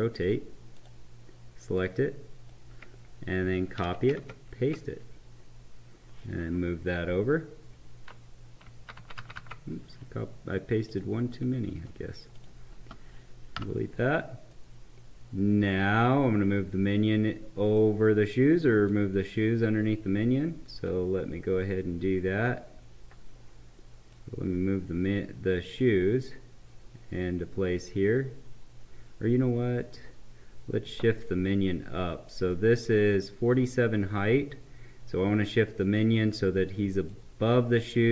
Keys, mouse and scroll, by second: 0.7-3.8 drag, 3.8 ctrl+c, 4.2 ctrl+v, 6.5 Left, 10.9 click, 12.3 shift+click, 13.6 Delete, 14.8 right click, 15.2 right click, 18.8-22.4 drag, 22.4-25.8 right drag, 25.8-34.1 drag, 34.1-37.0 right drag, 37.0-38.1 drag.